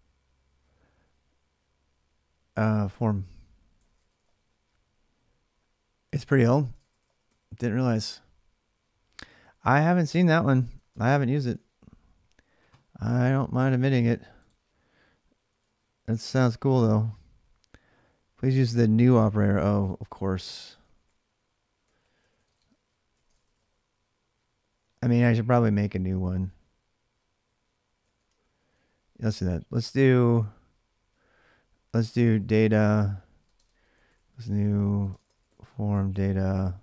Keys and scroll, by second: 2.3-4.2 typing, 6.4 ctrl+[, 6.6-7.0 typing, 6.8 Return, 10.2 ctrl+[, 10.4 typing, 10.6 Return, 11.2 alt+Tab, 15.0-15.8 typing, 18.9 alt+Tab, 20.4-23.6 typing, 24.7-25.4 typing, 27.8 ctrl+[, 28.0-30.4 typing, 31.6-36.8 typing.